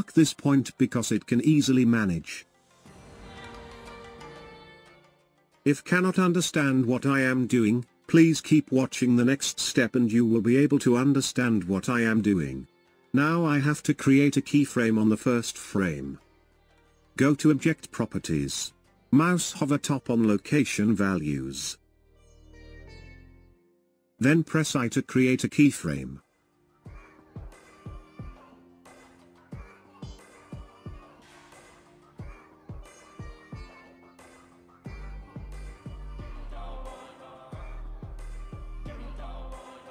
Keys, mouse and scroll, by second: 1.0 click, 2.3-5.4 drag, 7.8-9.4 scroll down 3, 12.1 click, 30.9 scroll up 2, 33.4 scroll down 4, 35.5-37.4 drag, 37.4 scroll up 3, 38.8-39.9 scroll up 1.